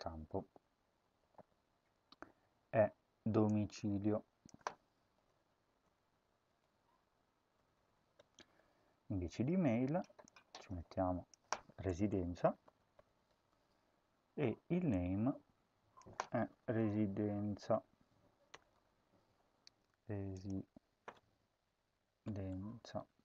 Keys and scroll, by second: 4.9-8.5 typing, 11.7-13.7 typing, 16.3-19.2 typing, 22.2-23.2 typing, 22.4 Right, 22.6 Right.